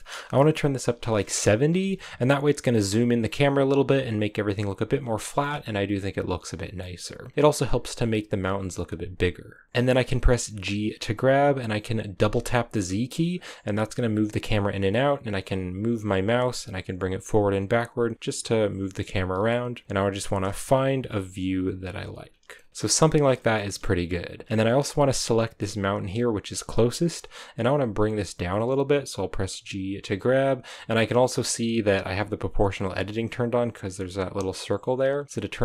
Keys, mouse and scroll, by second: 1.3-2.4 drag, 2.4-4.4 scroll down 1, 4.4-4.8 scroll up 1, 5.2-9.7 shift+middle drag, 9.7 g, 10.5 g, 13.9 middle click, 15.0 middle click, 19.2 g, 20.2 g, 22.5 scroll down 1, 22.7 g, 23.3 shift+middle click, 23.5-24.4 scroll up 3, 24.4-25.2 scroll down 1, 25.2-27.6 scroll up 1, 27.6 g, 31.9 g, 33.2 g.